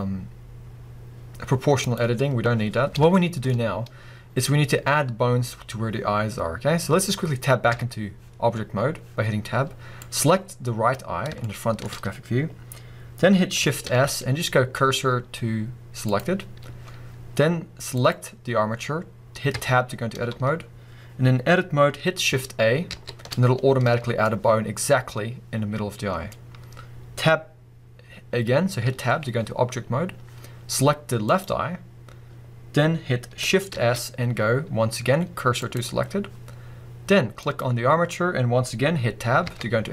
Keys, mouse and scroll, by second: 1.9 click, 2.9 scroll up 1, 3.1-10.0 shift+middle drag, 6.2 scroll down 1, 7.7 Tab, 10.0 click, 11.1-11.5 scroll up 3, 11.5-16.1 shift+middle drag, 13.8 shift+s, 16.1-18.1 drag, 19.5 Tab, 22.9 shift+a, 24.2-31.2 middle drag, 28.8 Tab, 31.2 click, 33.7 shift+s, 37.4 click, 39.4 Tab.